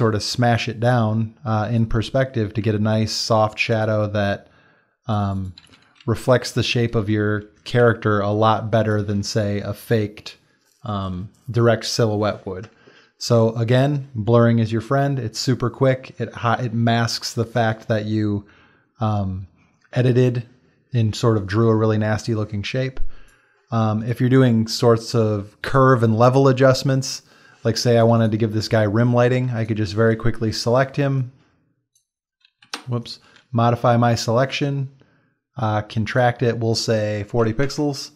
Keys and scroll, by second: 6.9 Down, 7.4 Down, 8.4 space, 37.6 Return.